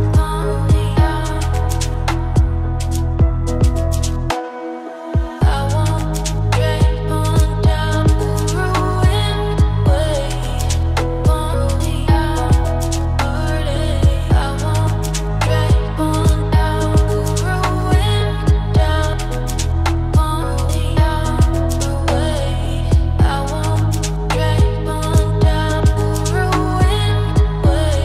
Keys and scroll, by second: 1.2 ctrl+a.